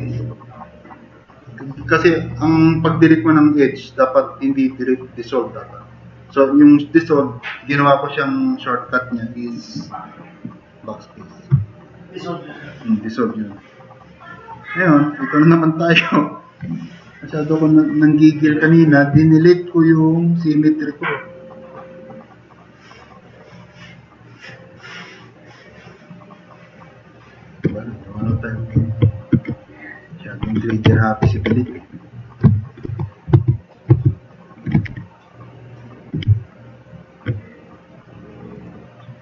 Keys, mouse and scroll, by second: 19.2 drag, 23.0-24.0 drag, 24.7 drag, 31.3 ctrl+shift+e, 32.5 drag, 32.9 alt+q, 33.4 alt+q, 33.9 alt+q, 34.8 e, 34.9 e.